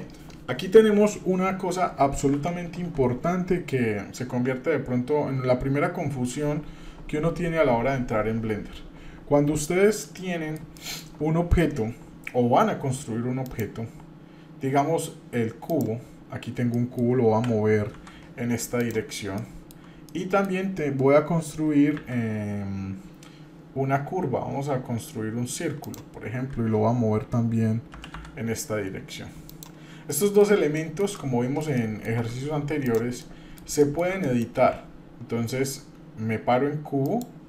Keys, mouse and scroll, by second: 2.4 Tab, 10.1 middle click, 10.8 shift+middle click, 13.4-15.8 drag, 16.7 middle click, 17.3 g, 19.3-19.7 shift+middle drag, 20.1 middle click, 21.9 shift+a, 27.9 g, 30.1 middle click, 30.7-31.6 shift+middle drag, 31.7-32.2 shift+middle drag, 32.8 drag, 33.2 shift+middle click, 33.8 shift+middle drag, 34.3 middle click, 37.0-37.4 drag.